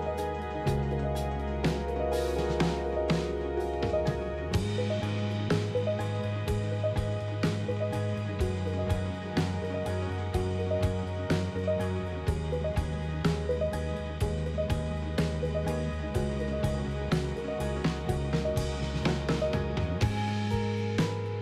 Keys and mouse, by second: 4.3 click, 10.8 Tab, 11.2 click, 12.5 click, 13.1 Tab, 14.1 middle click, 15.7 1.